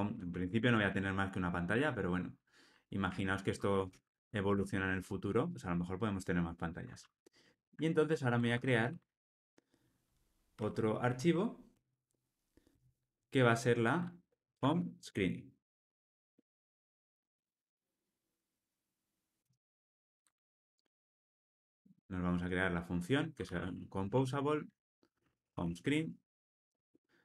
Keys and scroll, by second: 0.8 alt+Return, 3.0 super+z, 7.5 super+n, 24.1 Return.